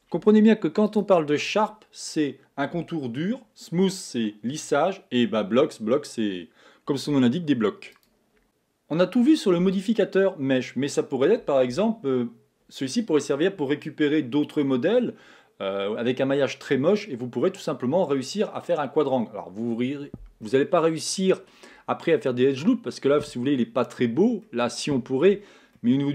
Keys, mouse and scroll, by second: 1.3 click, 21.2-22.2 middle drag, 22.2 scroll up 1, 22.8-26.1 middle drag.